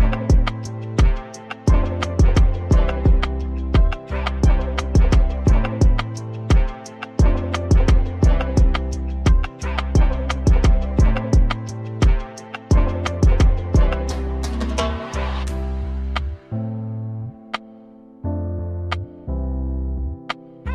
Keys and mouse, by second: 0.9 ctrl+r, 2.5 ctrl+r, 6.1 right click, 6.3 right click, 7.2 right click, 8.1 shift+s, 8.6 s, 10.1 e, 12.2 ctrl+r, 13.7 ctrl+r, 13.8 ctrl+r, 15.7 ctrl+r, 17.0 click, 17.5 click, 17.7 right click, 18.1-20.4 middle drag.